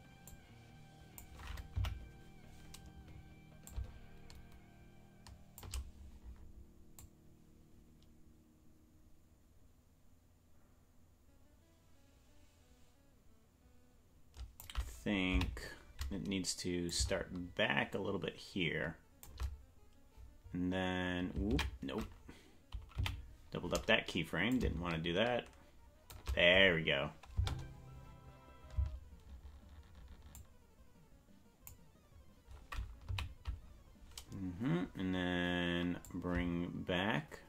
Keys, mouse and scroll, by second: 0.3 click, 1.9 Right, 3.6-19.3 drag, 16.8 Left, 23.1 ctrl+z, 23.1 Left, 24.5-26.5 drag, 27.3 space, 28.9 space, 30.4-31.8 drag, 33.2 Left, 36.0-37.4 drag.